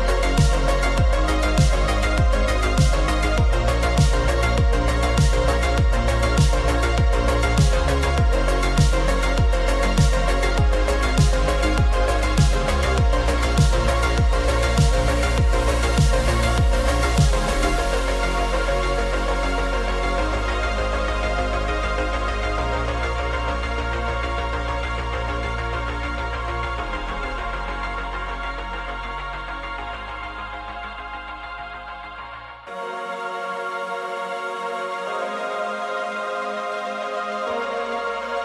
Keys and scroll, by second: 19.0 super+0, 21.5 super+-, 38.0 z.